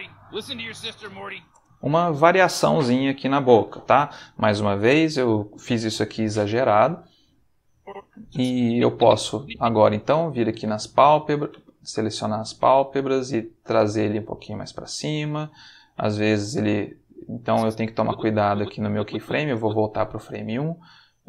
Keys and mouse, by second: 1.5 space, 7.7-9.6 drag, 10.2 click, 10.8 g, 11.5 Escape, 12.0 click, 12.9 click, 13.9 g, 14.7 space, 15.3 click, 16.2 click, 17.3-19.4 drag, 20.5 g.